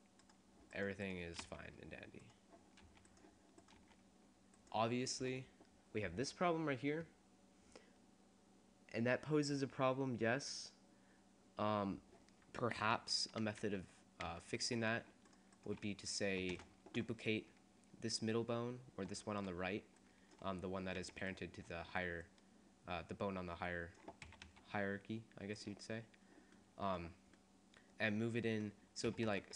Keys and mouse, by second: 1.7 r, 3.1 r, 3.9 r, 5.5 click, 13.0 ctrl+z, 13.8 ctrl+z, 14.4 ctrl+z, 15.4 click, 16.6 shift+d, 18.4 click, 21.0 g, 22.1 click, 23.4 click, 24.4 s, 25.9 click, 29.3 s.